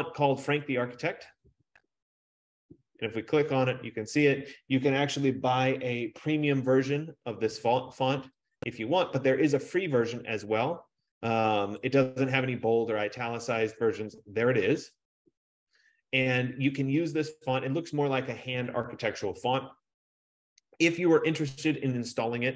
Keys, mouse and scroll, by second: 1.9 click, 9.2 click, 10.7-14.5 drag, 14.6 click, 14.6 scroll down 1, 14.8-17.0 drag, 22.3 click.